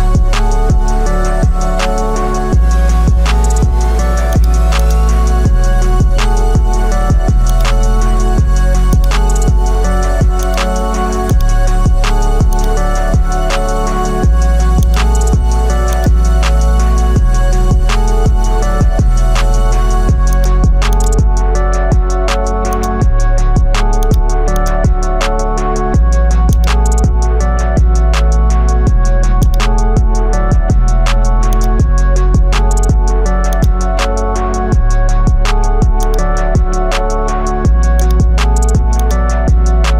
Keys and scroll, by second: 2.2 ctrl+o, 5.8 ctrl+i, 13.8 ctrl+t, 17.6 Return, 34.6 ctrl+i.